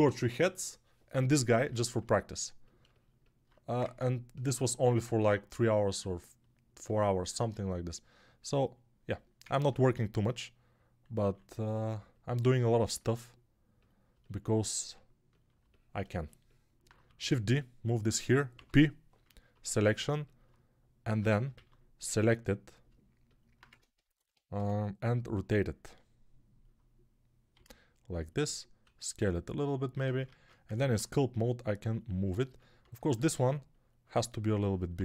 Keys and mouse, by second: 3.7 ctrl+Tab, 4.4-27.4 alt+middle drag, 9.3 Tab, 11.1 3, 17.0 shift+d, 18.4 p, 21.0 Tab, 21.4 alt+q, 23.5 Tab, 24.4 a, 27.4-28.7 drag, 27.4 g, 28.7-32.3 middle drag, 28.7 s, 30.1 ctrl+Tab, 32.3-35.0 alt+drag, 32.8 alt+q.